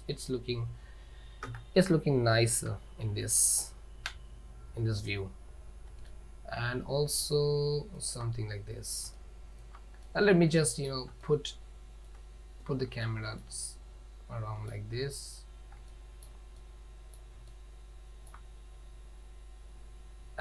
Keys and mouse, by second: 0.0 click, 1.5 KP_0, 2.8 z, 6.4-8.0 ctrl+middle drag, 8.0 ctrl+middle click, 9.3-9.7 ctrl+middle drag, 10.2-10.9 middle drag, 11.4-12.2 shift+middle drag, 13.1 shift+middle click, 13.8-14.8 middle drag, 16.0 shift+middle click, 16.7 middle click, 17.6-18.5 shift+middle drag.